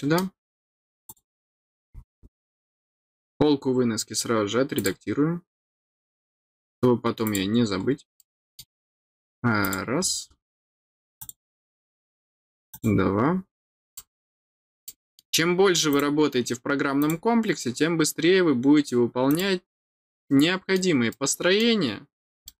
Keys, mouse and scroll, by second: 1.0 click, 1.8 scroll down 1, 2.9 scroll down 1, 3.7 scroll down 1, 4.7 click, 7.2 click, 8.1 middle click, 9.6 click, 10.2 scroll down 1, 11.1 click, 12.7 click, 13.2-13.7 scroll down 2, 13.9 middle click, 14.8 middle click, 15.9 click, 16.9 click, 19.2 click, 20.2 middle click, 21.1 middle click, 22.4 middle click.